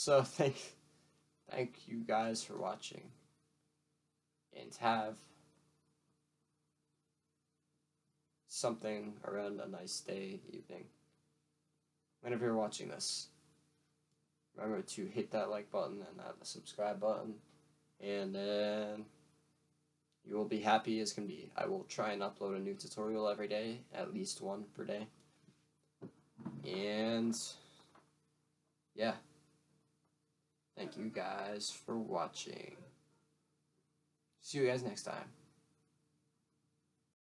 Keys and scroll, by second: 33.7 F1, 34.4 F1.